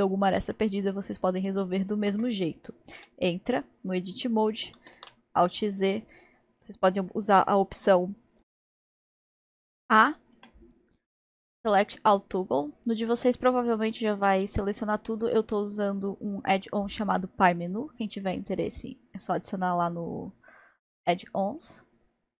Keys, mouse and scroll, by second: 1.3-2.2 scroll up 1, 3.0 Tab, 5.0 alt+z, 10.4 a.